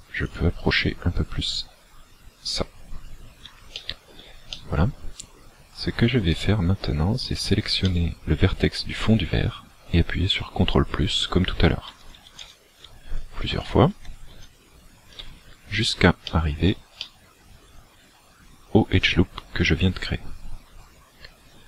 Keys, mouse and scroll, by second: 0.4 click, 2.7-3.8 scroll down 4, 3.8 shift+middle click, 3.8 scroll down 1, 4.6 middle click, 6.4 right click, 8.0 middle click, 12.0 ctrl+KP_Add, 12.2 ctrl+KP_Add, 12.4 ctrl+KP_Add, 12.9 ctrl+KP_Add, 13.5 ctrl+KP_Add, 13.9 ctrl+KP_Add, 14.4 ctrl+KP_Add, 16.4 shift+middle click, 17.0 middle click, 18.6-19.0 scroll up 3.